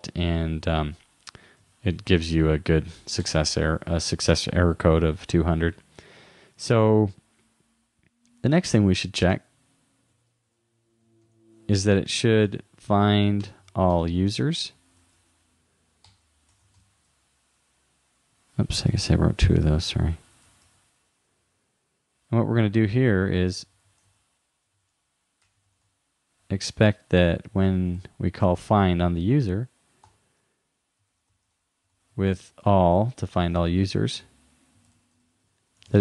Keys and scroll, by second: 1.6 super+w, 15.0 super+Right, 18.8 super+Left, 19.0 shift+Down, 22.8 shift+u, 24.1 shift+-, 27.4-28.9 typing, 31.5 shift+9, 31.9 shift+;, 32.8 shift+0, 35.2 shift+-.